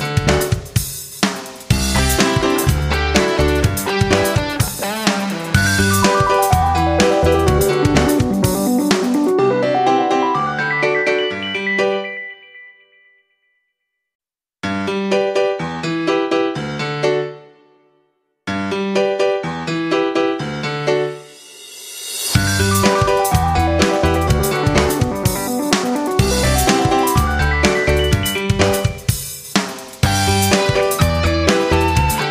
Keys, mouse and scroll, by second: 1.1-4.7 drag, 9.9 F9, 12.0-32.3 drag.